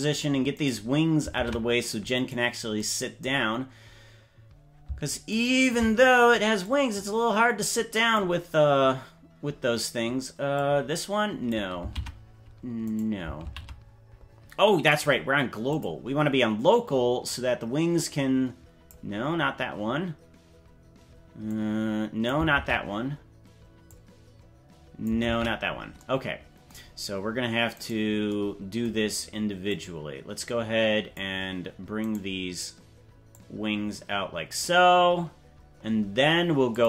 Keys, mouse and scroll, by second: 0.6 right click, 1.4 ctrl+Tab, 2.2 right click, 5.4 shift+right click, 6.6-8.2 drag, 10.5-11.5 drag, 11.8 z, 13.8 z, 14.9-15.9 drag, 17.2-18.9 drag, 21.5 click, 22.9 ctrl+z, 23.9-25.1 drag, 25.7 ctrl+z, 27.8 right click, 29.6-31.2 drag, 32.1 right click, 33.3-34.5 drag, 36.7-36.8 drag.